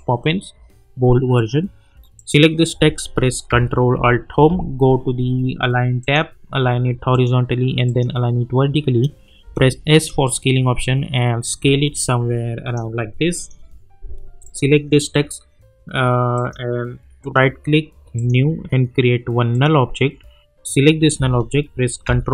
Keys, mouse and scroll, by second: 1.3 click, 4.3 ctrl+alt+Home, 4.8 scroll up 1, 6.0 click, 9.4 s, 10.1-13.3 drag, 17.2 right click, 18.1 click.